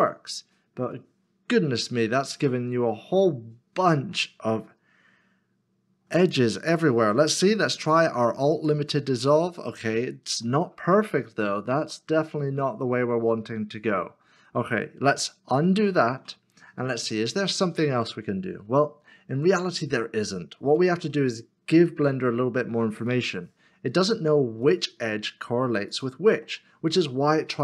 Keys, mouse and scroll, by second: 1.0 middle click, 7.6 x, 10.4 x, 10.5 middle click, 15.5 ctrl+z, 15.9 ctrl+z, 16.9 middle click, 25.4 middle click, 25.9 shift+click.